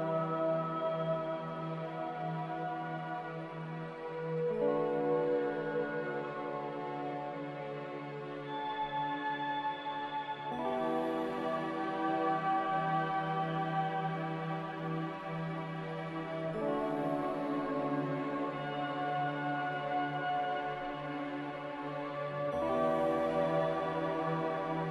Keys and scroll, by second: 2.1 m, 3.8 Escape, 18.2 a.